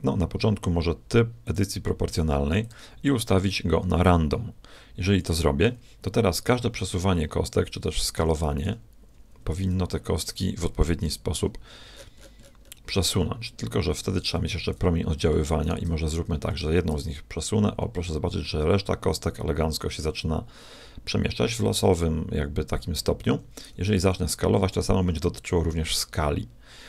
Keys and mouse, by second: 1.4-4.6 drag, 6.5 s, 8.6 g, 11.0 g, 15.6-17.8 right drag, 16.9 g, 23.9 s.